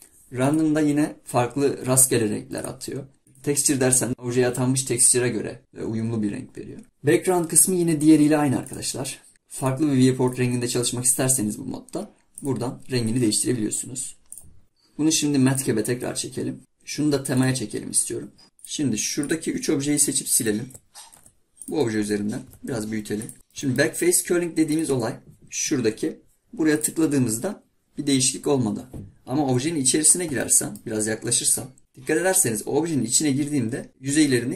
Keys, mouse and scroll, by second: 2.6 click, 18.4 click, 19.2 click, 20.0 shift+drag, 20.4 shift+click, 21.2 Delete, 21.6 click, 22.5 s, 23.4-24.7 middle drag, 24.7-27.7 drag, 30.4-31.2 middle drag, 31.8-33.9 middle drag.